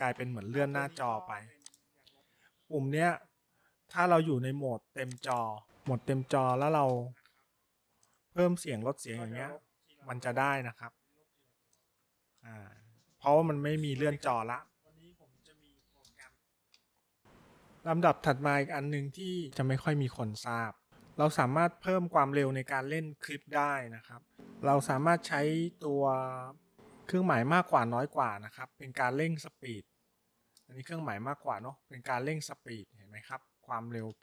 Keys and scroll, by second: 10.2 Up, 10.8 Up, 10.8 Down, 11.1 Down, 16.2 Up, 26.7 shift+., 31.5 >, 32.2 >.